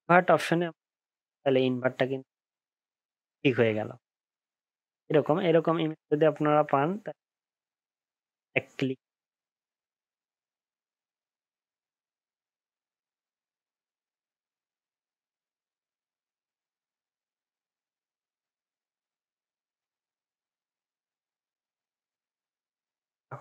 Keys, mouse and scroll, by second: 1.5 alt+scroll up 1, 2.0 alt+scroll down 1, 3.1 alt+scroll up 1, 3.3 alt+scroll down 1, 3.6 alt+scroll up 1, 3.8-5.1 alt+scroll down 1, 5.1 alt+scroll up 6, 5.7 ctrl+z, 6.1-6.4 alt+scroll down 5, 6.4-6.9 alt+scroll up 1, 7.2 alt+scroll down 1, 7.7 alt+scroll up 1, 8.0-8.4 alt+scroll down 1, 8.4 alt+scroll up 1, 8.9-9.7 alt+scroll down 1, 10.0-10.7 alt+scroll up 6.